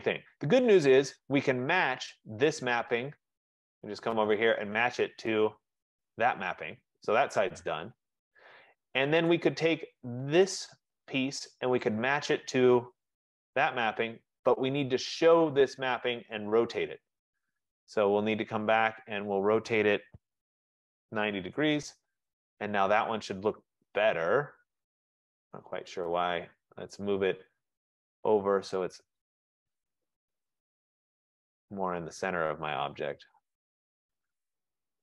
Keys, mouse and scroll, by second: 0.4 middle click, 1.6 F15, 2.2 click, 4.5 click, 6.0 click, 9.4 click, 10.7 click, 12.1 click, 13.3 click, 16.5 click, 21.3 shift+click, 22.7 middle click, 23.1 middle click, 23.6 middle click, 27.2 right click, 27.6 middle click, 31.4 click, 34.2 click, 34.8 middle click.